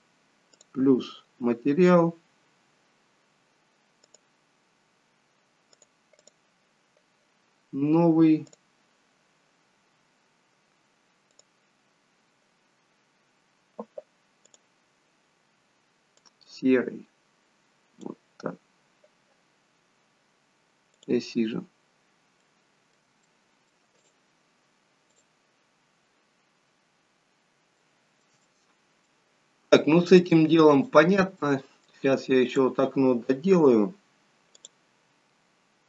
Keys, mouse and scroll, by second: 0.7 click, 4.2 click, 6.3 click, 21.0 click, 21.8-22.6 scroll down 2, 22.6 middle click, 23.4 shift+middle click, 25.3 click, 27.7 click, 27.8 shift+middle click, 28.4 middle click, 30.1 click, 31.4 middle click, 32.4 click.